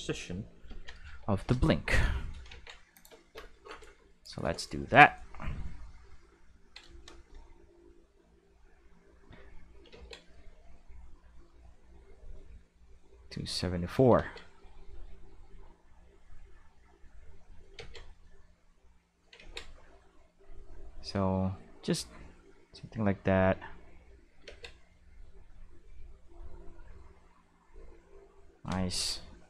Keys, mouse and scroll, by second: 0.7 ctrl+l, 1.1 x, 1.4 Return, 2.5 ctrl+Tab, 2.9 click, 9.0 click, 9.9 ctrl+z, 10.8-13.6 drag, 14.2 ctrl+z, 14.9-17.0 drag, 17.8 ctrl+z, 18.3 click, 19.4 ctrl+z, 20.1-22.9 drag, 23.6 click, 24.4 ctrl+z, 25.0 click, 26.1 click, 27.7-28.7 drag.